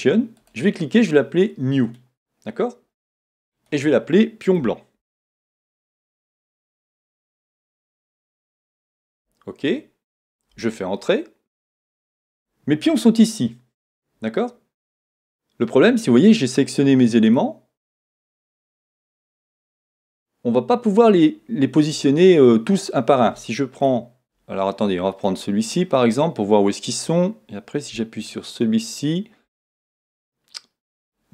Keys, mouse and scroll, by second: 1.9 right click, 3.4 click, 17.3 click.